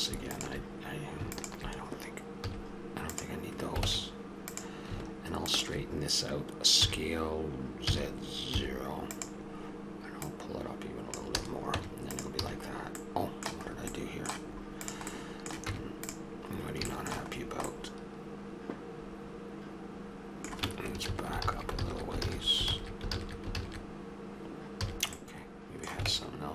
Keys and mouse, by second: 2.5 x, 3.8 ctrl+Tab, 5.5-6.8 drag, 6.8 s, 10.2 click, 11.4 a, 11.7 Tab, 12.4 a, 14.8-16.6 drag, 15.6 Tab, 21.0 ctrl+z, 24.8 a, 26.1 ctrl+Tab.